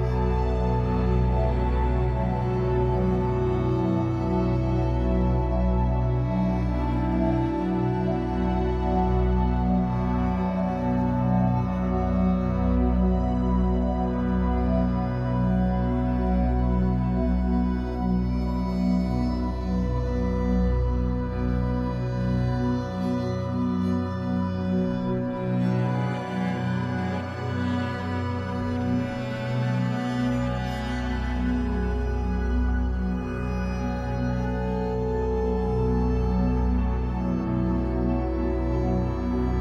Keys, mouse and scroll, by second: 0.8 click, 0.9 middle click, 1.5 click, 2.3-5.0 middle drag, 3.0 f, 5.0-6.1 drag, 6.1 middle click, 7.0 shift+click, 8.0 f, 8.5 middle click, 9.2 click, 9.7-10.7 shift+middle drag, 10.7-11.7 shift+drag, 11.7-12.0 scroll down 1, 12.0-14.0 shift+middle drag, 12.8 ctrl+r, 14.0 click, 14.1 shift+middle click, 14.4-14.7 scroll up 2, 14.7-16.9 drag, 16.9 f, 17.6-19.2 drag, 19.2 f, 19.8-21.5 shift+middle drag, 21.5 click, 22.1-23.4 middle drag, 23.4 shift+click, 23.7-25.5 shift+middle drag, 25.5 ctrl+shift+click, 26.2-27.2 shift+middle drag, 27.2 shift+click, 28.0 middle click, 28.5 shift+click, 28.8 middle click, 29.7 click, 30.3 middle click, 30.8 click, 32.7-39.6 middle drag, 33.2 z, 34.6 scroll down 2, 34.8 Tab, 35.4 scroll down 2, 36.1 scroll up 2, 38.4 scroll down 2, 39.1 scroll up 2.